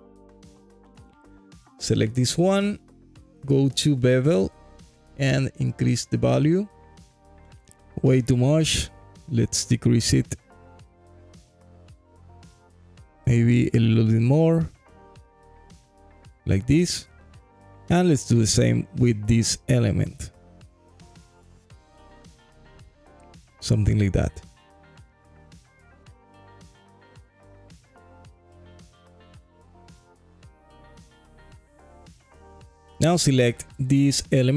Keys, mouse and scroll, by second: 0.4 alt+middle click, 0.9 alt+click, 1.4 scroll up 1, 1.8 alt+middle click, 2.3 click, 4.4-7.2 drag, 5.6 KP_0, 8.3-10.9 drag, 9.4 KP_0, 13.7-15.7 drag, 14.5 KP_0, 14.8 KP_0, 17.5 alt+click, 19.1 click, 19.9-21.6 drag, 20.9 KP_0, 21.0 KP_0, 23.9 g, 24.3 y, 26.1 click, 27.0 click, 27.5 shift+click, 27.8 shift+click, 28.8 g, 29.0 y, 30.4 alt+click, 31.3 click, 31.8-32.1 scroll down 2, 32.2-33.3 alt+drag, 33.9 click, 34.3 alt+click.